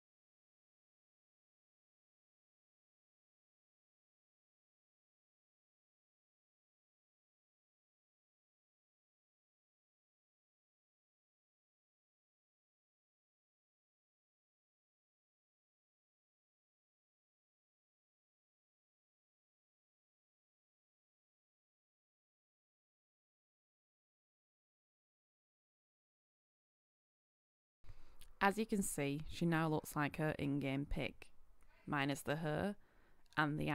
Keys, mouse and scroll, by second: 2.2-3.0 scroll up 1, 3.0 click, 3.4-3.9 scroll down 1, 3.9 click, 4.4 scroll up 1, 4.8 click, 7.7 Return, 8.2-8.8 scroll up 1, 8.8 click, 9.2-9.6 scroll down 1, 9.7 click, 10.1-10.4 scroll up 1, 10.7 click, 13.8 Return, 20.5-25.6 drag, 26.7 Return, 27.5-33.7 drag.